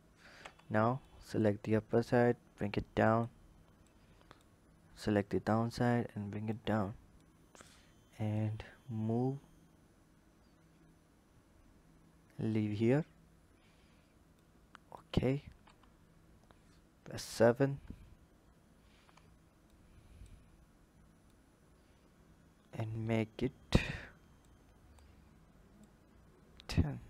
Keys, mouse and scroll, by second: 0.2 Tab, 0.8-2.0 drag, 3.6 click, 5.0 click, 7.0 click, 8.1 click, 14.2-15.2 drag, 15.2 scroll up 1, 15.4 Tab, 16.8 KP_7, 17.3-18.8 scroll down 1, 18.8 Tab, 19.5 click, 21.1 click, 24.2 click, 25.5 click.